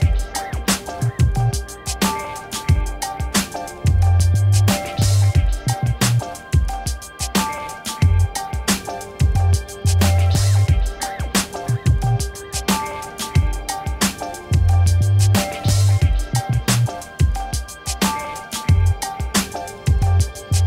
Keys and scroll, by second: 1.2 1, 1.8 Return, 2.6 ctrl+a, 2.9 v, 4.8 ctrl+d, 8.1 ctrl+-, 11.5 Return.